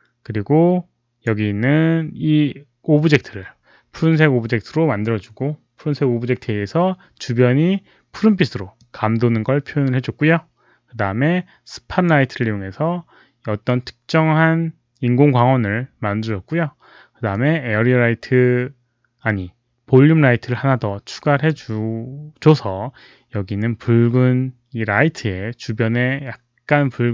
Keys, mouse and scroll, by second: 8.7-12.0 drag, 17.2-21.4 drag.